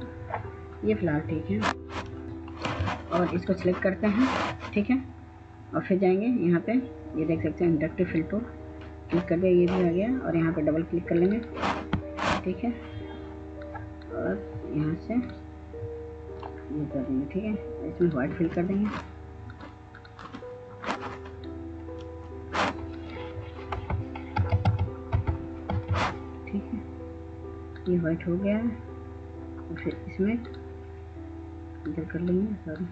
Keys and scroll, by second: 23.1 0, 23.6 Tab, 23.9 Tab, 24.4-25.5 typing.